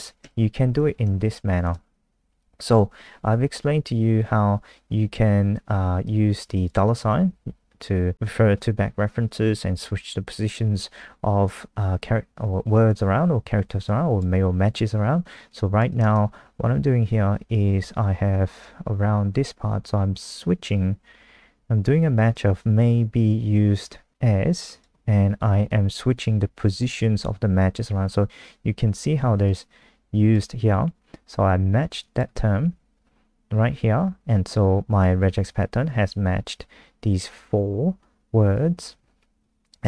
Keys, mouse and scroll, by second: 0.2 Tab, 1.0 shift+Tab, 1.6 click, 12.3 F5, 13.8 click, 29.4 super+click, 32.0 click, 32.7 Escape.